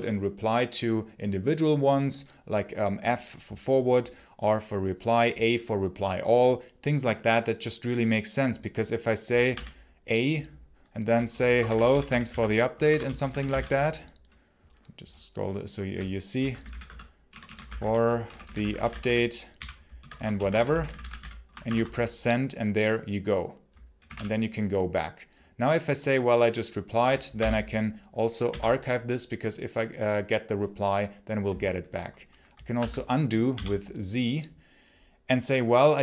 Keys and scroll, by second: 9.3 a, 11.0-13.9 typing, 16.2-21.5 typing, 23.6-24.4 typing, 27.2 x, 28.3 y, 32.6 z, 33.3 k.